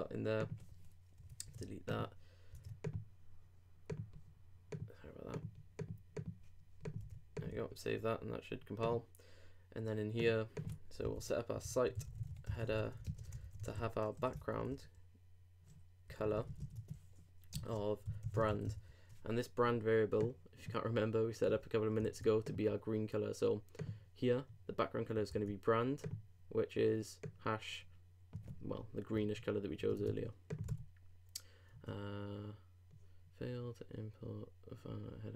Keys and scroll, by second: 1.2 super+BackSpace, 1.4 super+Tab, 7.5 super+s, 13.0 shift+r, 13.3 shift+Return, 17.5 shift+Tab, 17.6 shift+4, 18.9 super+;, 22.0 super+f, 29.2 super+Tab.